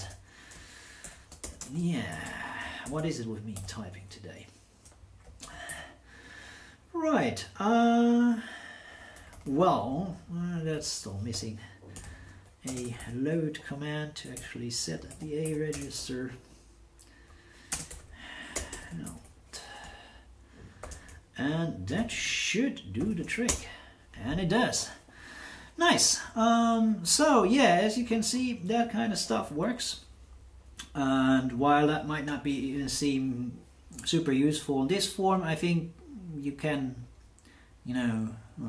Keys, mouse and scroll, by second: 1.0-4.1 typing, 5.7 alt+n, 9.3 Left, 9.5 Left, 9.6 Left, 9.7 Left, 9.8 Left, 11.7-14.3 typing, 15.4 alt+n, 15.7 space, 16.1 Right, 16.7 Right, 16.8 Right, 16.9 Right, 17.7-19.5 typing, 20.8 shift+2, 21.9 shift+9, 22.9 shift+9, 23.4 Return.